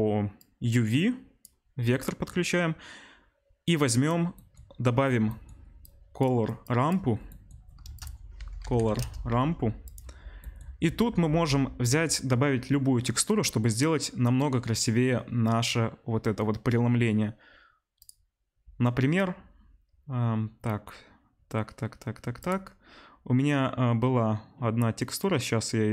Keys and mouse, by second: 0.4-4.1 drag, 5.8-7.6 drag, 7.8 shift+a, 10.0-18.3 middle drag, 18.3-25.9 drag.